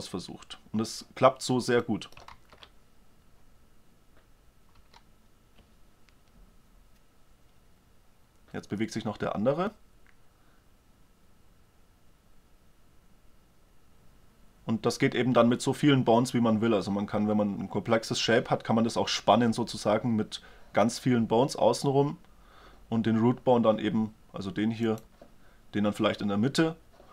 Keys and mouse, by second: 2.0 middle click, 2.3 alt+a, 4.8 a, 24.9-26.7 right drag.